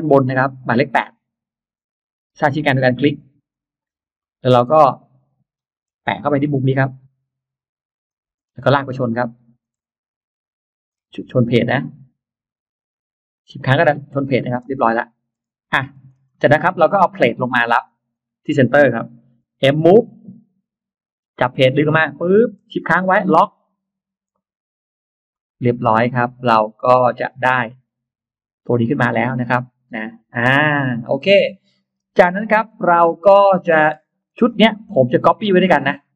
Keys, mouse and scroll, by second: 3.3 click, 4.1 middle click, 4.5 scroll up 1, 4.6 scroll down 1, 5.3-6.0 scroll up 2, 7.9 click, 8.2-8.5 scroll down 2, 9.5-9.8 scroll down 3, 10.7-11.7 shift+scroll up 4, 13.6 shift+click, 14.4 scroll down 2, 14.5 space, 14.8 middle click, 15.3 scroll down 2, 15.7-16.3 scroll up 4, 16.1-17.4 middle drag, 16.3 scroll down 2, 17.7 click, 18.0 middle click, 19.7 m, 21.1 click, 25.1 shift+click, 25.7-26.0 scroll down 1, 25.7 space, 26.0-26.3 scroll up 1, 26.2-27.2 middle drag, 27.1-27.8 scroll down 1, 28.4-28.7 scroll down 2, 28.7 middle click, 29.2 click, 30.1-31.1 scroll up 4, 31.3 middle click, 31.9 scroll up 2, 32.3 middle click, 33.5 middle click, 33.7 scroll up 2, 33.9 middle click, 35.1 click, 35.7 shift+click.